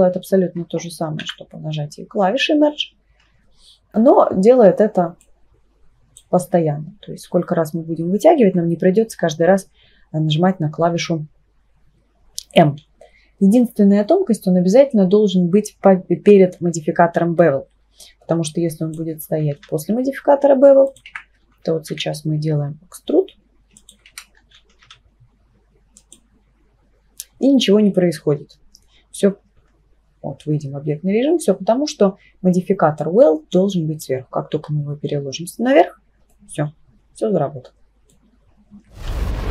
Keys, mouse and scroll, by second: 1.2 m, 5.2-6.2 drag, 18.5-19.0 drag, 19.6 e, 21.1 ctrl+z, 21.9 e, 24.1 ctrl+z, 24.8 e, 29.6 Tab, 33.0-34.0 drag, 36.3-39.3 middle drag.